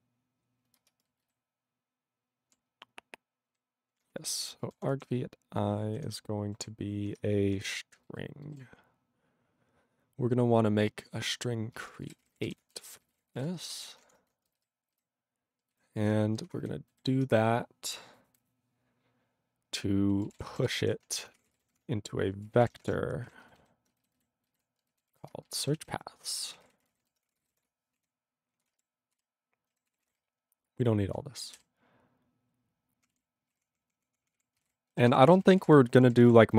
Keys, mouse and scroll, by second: 1.0 ctrl+space, 1.3 ctrl+alt+b, 3.5 ctrl+b, 3.9 ctrl+w, 4.0-5.3 typing, 6.1 ctrl+e, 6.7 ., 7.2 BackSpace, 7.8 ctrl+space, 8.2 ctrl+alt+b, 8.5 ctrl+alt+b, 11.8 ctrl+g, 11.8-14.2 typing, 14.7 ctrl+alt+b, 16.7 ctrl+alt+f, 16.9 ctrl+alt+b, 22.6 ctrl+d, 22.6 ctrl+e, 23.3 ;, 23.6 ctrl+b, 23.6 ctrl+b, 24.2 alt+b, 24.5 alt+b, 25.1 alt+b, 26.4-28.1 typing, 28.7 ctrl+space, 28.7 ctrl+e, 29.2 ctrl+g, 29.7 ctrl+g, 30.0 ctrl+s, 30.0 ctrl+n, 30.1 ctrl+space, 30.2-31.1 ctrl+n, 31.5 ctrl+p, 31.6 ctrl+w, 33.1 ctrl+e, 33.5 ctrl+space, 33.5 ctrl+a, 33.6 ctrl+p, 33.7 ctrl+p, 34.0 ctrl+p, 34.1 ctrl+p, 34.4 ctrl+p, 34.6 ctrl+g, 34.6 ctrl+e, 35.2 ctrl+s, 35.4 ctrl+space, 35.4 ctrl+n, 35.4 ctrl+e, 35.6 ctrl+n, 35.9 ctrl+e, 36.0 ctrl+n, 36.0 ctrl+e, 36.1 ctrl+n, 36.2 ctrl+e, 36.3 ctrl+g.